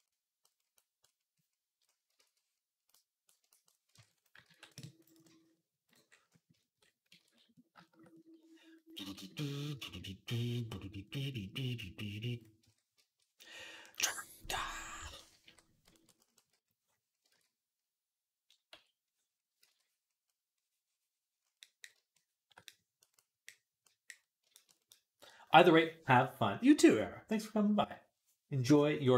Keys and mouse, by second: 0.1 click, 0.7-5.9 drag, 2.0 ctrl+z, 3.9 ctrl+Tab, 4.3 ctrl+s, 5.9 middle click, 6.3 shift+click, 7.0 ctrl+s, 7.1 middle click, 8.0 middle click, 9.1 middle click, 9.5-11.8 shift+middle drag, 12.0 click, 12.4 ctrl+Tab, 14.8-16.2 typing, 17.1 ctrl+z, 18.5 x, 19.4 ctrl+z, 21.3-29.1 drag.